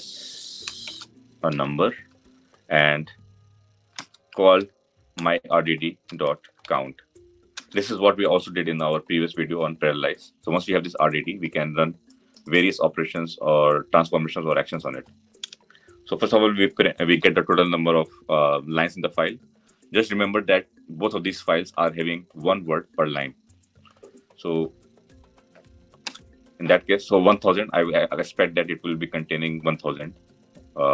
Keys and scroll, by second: 5.0 Return.